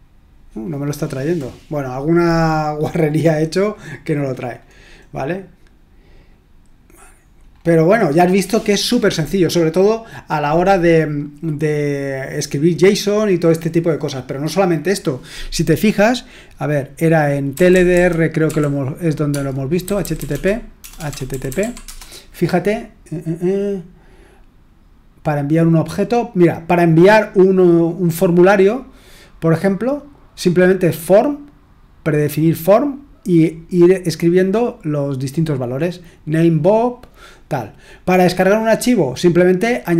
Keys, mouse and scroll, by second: 3.1-4.6 scroll down 2, 4.6-5.9 scroll down 1, 7.1-7.4 scroll down 2, 7.4-8.1 scroll up 2, 8.1-8.6 scroll up 1, 8.6 scroll down 2, 17.2-22.0 typing.